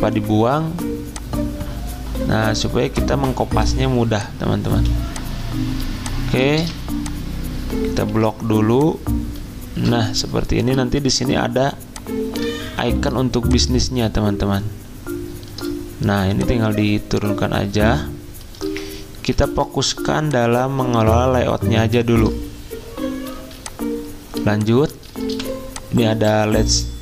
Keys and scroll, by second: 1.9 t, 4.7 z, 6.3 v, 8.1 ctrl+g, 19.4 ctrl+z, 23.4 z, 25.3 v.